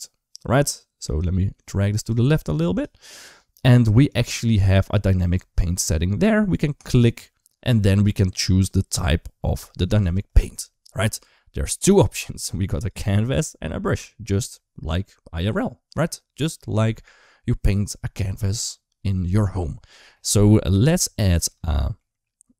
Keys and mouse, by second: 0.9 click, 6.5 click, 12.7-19.2 drag, 20.8 shift+middle click, 21.5 middle click.